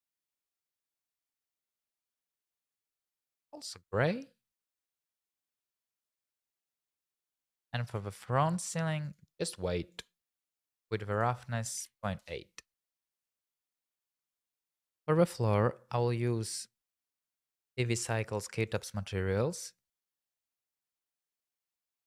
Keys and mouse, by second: 2.1 click, 3.1 click, 4.7 click, 7.3 Tab, 7.6 click, 7.9 Tab, 8.1 click, 9.0 click, 9.9 click, 11.1-12.2 drag, 13.3 click, 14.1 Tab, 16.2 click, 17.4 click, 18.7 click, 19.9-21.1 drag, 21.8 click.